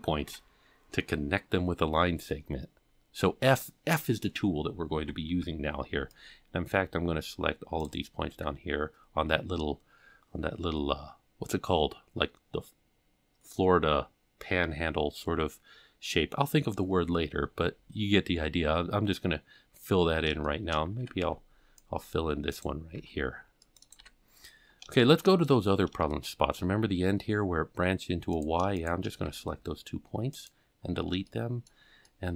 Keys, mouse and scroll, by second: 0.7 f, 5.0 alt+a, 5.4 c, 8.3 f, 8.8 scroll down 1, 20.0 scroll down 1, 20.5 shift+middle click, 21.0 alt+a, 21.2 c, 23.0 c, 24.0 f, 24.5-25.0 scroll down 3, 25.0 shift+middle click, 26.1 shift+middle click, 26.8 scroll up 5, 28.4 click, 28.8 shift+click, 29.3 x, 30.8-31.3 scroll down 4, 31.3 shift+middle click, 32.1 shift+middle click.